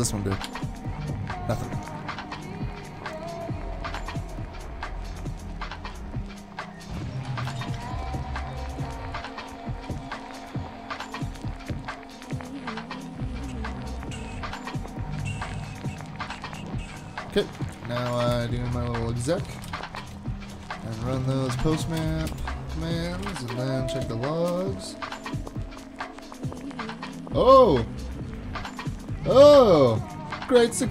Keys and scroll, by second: 0.5 alt+super+/, 17.6 super+Tab, 18.1 super+Tab, 18.3 super+Tab, 19.2-20.5 typing, 20.5 alt+c, 21.3 Down, 21.5 Down, 21.6 Down, 21.7 Down, 22.0 Return, 22.3 Return, 22.8-25.0 typing.